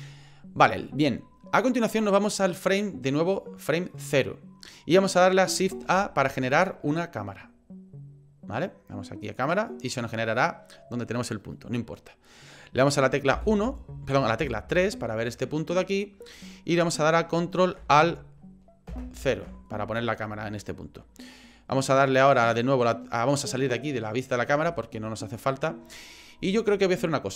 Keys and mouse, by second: 5.8 shift+a, 13.3 KP_1, 14.4 KP_3, 18.9 ctrl+alt+KP_0, 23.6 middle click, 24.7 shift+middle click, 25.2 middle click.